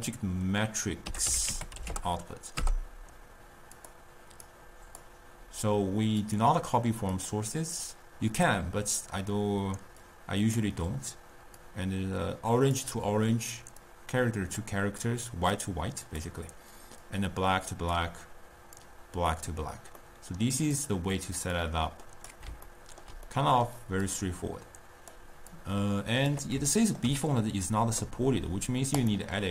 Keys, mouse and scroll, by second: 4.5 click, 6.6 drag, 7.2-10.1 drag, 11.6-15.1 drag, 16.5 click, 17.1 click, 18.8 drag, 20.0-20.8 middle drag, 20.8 click, 21.6 drag, 22.8-24.1 ctrl+middle drag, 24.1 click, 25.6 click, 26.8-29.0 ctrl+middle drag, 29.0 click.